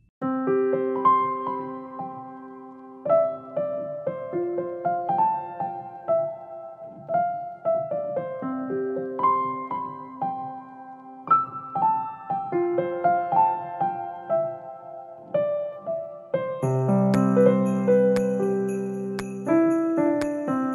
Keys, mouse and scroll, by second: 9.8-14.5 typing.